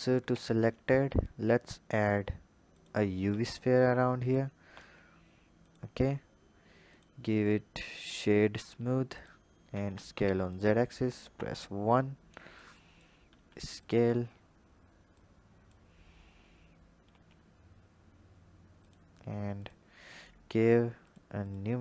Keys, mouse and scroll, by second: 0.1 shift+a, 3.1 s, 4.6 s, 6.7-9.6 drag, 9.6 s, 11.3 KP_1, 12.4 click, 13.1 s, 14.0-14.6 scroll up 2, 14.6-15.0 scroll up 3, 15.0-16.1 drag, 16.1-16.9 scroll up 2, 16.9 s, 19.4-21.0 drag, 21.3 click.